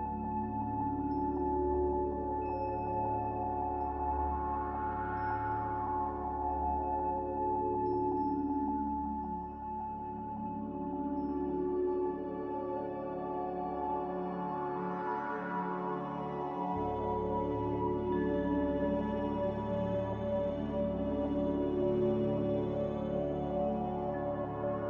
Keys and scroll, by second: 0.9 z, 1.7 b, 4.8 r, 10.1 Escape, 10.3 Escape, 10.6 g, 14.1 a, 16.2 g, 18.5 Escape, 18.6 Escape, 18.8 Escape, 19.4 a, 22.1 typing, 23.6 Return, 24.6 g, 24.6 a.